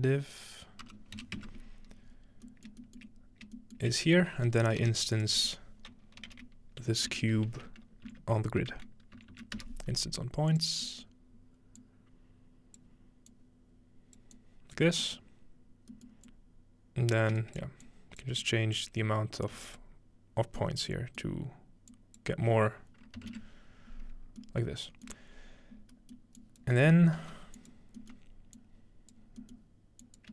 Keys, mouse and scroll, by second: 2.5-2.9 shift+middle drag, 3.1-4.5 shift+middle drag, 3.2-4.4 scroll up 1, 4.7-5.8 shift+middle drag, 4.9 shift+a, 5.2-6.9 drag, 6.2-7.6 typing, 8.1 End, 8.3 Down, 9.2 End, 10.5-16.0 drag, 16.3-19.6 drag, 17.4 shift+right click, 18.3 shift+right click, 18.8 shift+right click, 19.6 5, 19.7 click, 20.6-23.0 middle drag, 21.9 click, 24.2 scroll down 2, 25.1 middle click, 25.7-26.7 scroll down 3, 26.4 click, 26.7 scroll up 1, 27.2 g, 27.6 click, 27.6-28.0 scroll up 1, 28.2-30.3 drag.